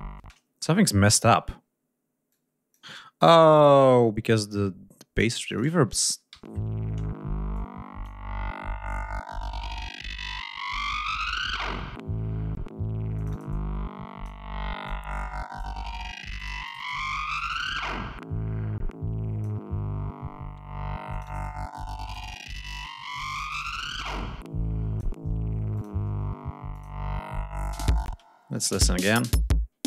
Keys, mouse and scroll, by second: 0.1 space, 2.2 click, 2.8 scroll up 2, 3.5-3.8 scroll down 2, 5.2 click, 6.2 l, 7.4 click, 13.1-14.3 drag, 14.8 click, 16.3 click, 17.2 click, 17.8-19.5 drag, 21.0 click, 23.2-25.1 drag, 25.7 click, 26.6 click, 27.6 click, 28.0 space, 28.4 click, 28.7 space, 29.0-29.7 ctrl+scroll up 4.